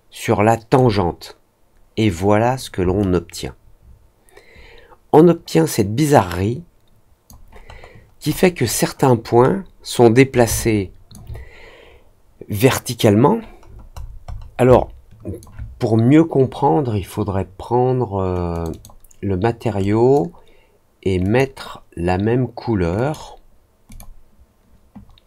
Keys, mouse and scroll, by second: 2.9-7.2 alt+drag, 7.7-8.7 alt+scroll up 3, 9.4 alt+middle click, 10.5 alt+click, 13.6 middle click, 13.9 middle click, 14.2 middle click, 14.6 alt+click, 18.5 click, 18.6 click, 19.7-21.3 drag, 22.9 click, 23.8 click.